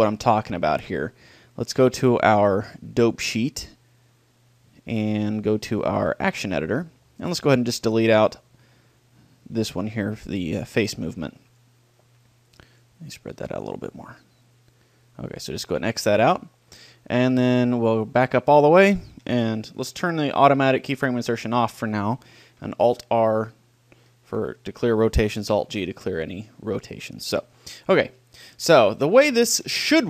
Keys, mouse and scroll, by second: 4.1-5.8 middle drag, 5.8-7.5 drag, 7.5-11.3 middle drag, 11.3-14.4 drag, 14.4-15.4 middle drag, 15.4-17.1 drag, 17.9-19.6 drag, 21.5-23.1 drag, 22.9 alt+r, 25.5 alt+g, 27.5-28.7 middle drag, 28.7 KP_1, 29.8-30.0 middle drag.